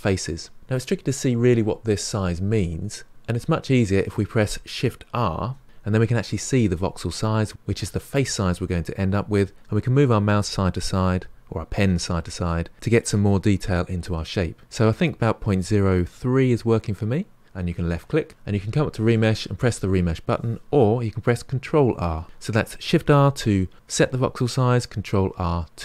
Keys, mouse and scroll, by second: 5.3 shift+r, 18.7-21.7 drag, 21.9 ctrl+r.